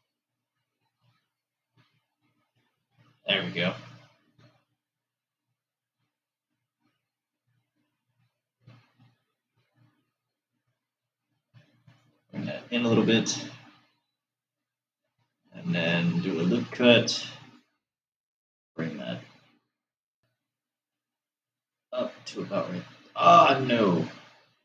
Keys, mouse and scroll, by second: 1.8 alt+shift+click, 16.8 ctrl+r.